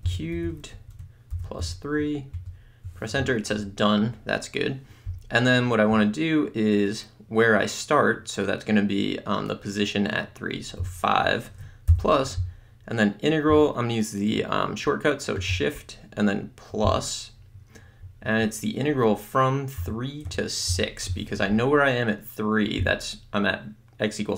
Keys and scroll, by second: 0.0-0.4 typing, 0.8 Right, 1.7 3, 2.4 Return, 10.8 5, 19.9 3, 20.3 Tab, 20.7 6.